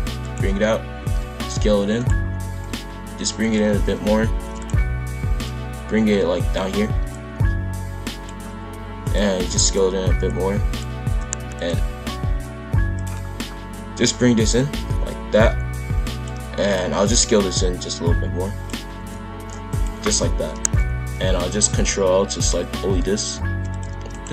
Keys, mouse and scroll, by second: 0.6-0.9 scroll up 1, 0.9 s, 3.6 shift+f, 5.4 Left, 7.1 click, 8.6 s, 9.4 s, 10.3 click, 11.5 alt+click, 12.9-14.0 drag, 16.6 click, 17.5 click, 18.9 a, 19.7 click, 20.5 ctrl+l, 21.3 shift+f, 23.9 shift+d.